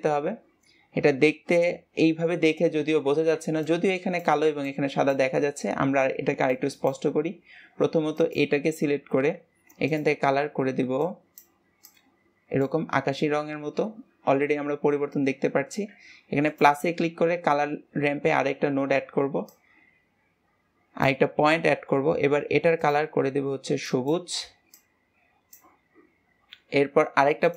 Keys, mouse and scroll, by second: 6.8-10.3 drag, 16.8-17.6 drag, 17.6-19.4 scroll up 2, 19.8-22.8 drag, 23.1 click.